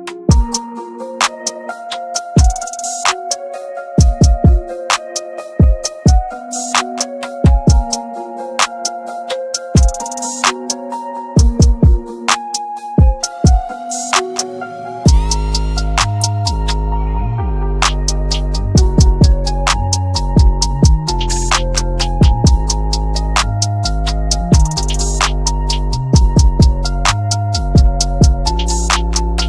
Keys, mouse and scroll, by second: 1.6 ctrl+right click, 2.2 click, 5.3-7.4 shift+drag, 7.4 shift+right click, 8.4 scroll up 1, 9.1 shift+click, 9.5-10.9 scroll down 1, 11.3-19.2 drag, 19.2 shift+right click, 20.5 click, 23.7 scroll up 1, 25.2 click.